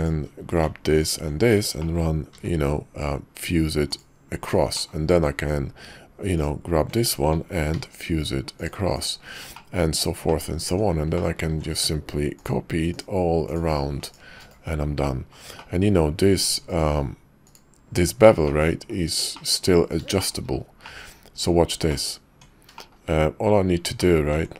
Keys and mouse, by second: 0.9-1.3 ctrl+drag, 2.3 y, 6.4 alt+click, 7.7 y, 9.6 middle click, 10.4 middle click, 10.7 Tab, 11.1 drag, 11.4 alt+x, 12.4-13.7 shift+middle drag, 15.6 middle drag, 16.6-17.5 drag, 18.4-18.9 middle drag, 19.3 shift+middle click, 20.2 shift+middle click, 20.8-21.4 drag, 21.9 click, 22.3 Tab, 22.7 shift+middle click, 24.0 click, 24.3 Tab.